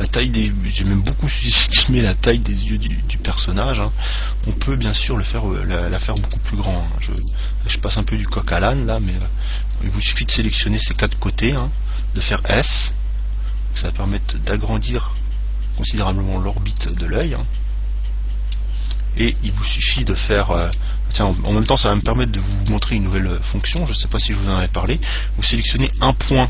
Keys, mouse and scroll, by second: 0.8-3.7 middle drag, 3.9 scroll down 1, 4.1-4.5 scroll up 1, 4.5 Tab, 4.5-5.5 middle drag, 5.1 Tab, 6.3 ctrl+Tab, 8.0 right click, 10.4-13.4 right drag, 12.6 s, 17.1 click, 17.4-19.3 middle drag, 19.5 KP_1, 20.7 KP_3, 22.0-24.7 middle drag, 26.1-26.4 right drag.